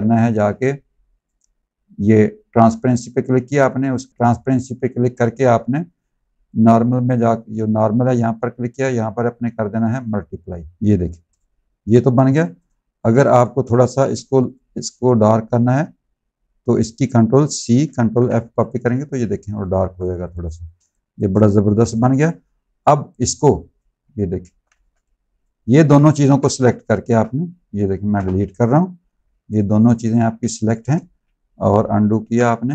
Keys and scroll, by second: 11.0 z, 13.0 space, 17.6 ctrl+c, 17.9 ctrl+f, 19.6 z, 20.7 space, 21.7 v, 24.3 ctrl+z, 26.1 v, 28.0 BackSpace, 29.0 z, 30.3 space, 32.1 ctrl+z.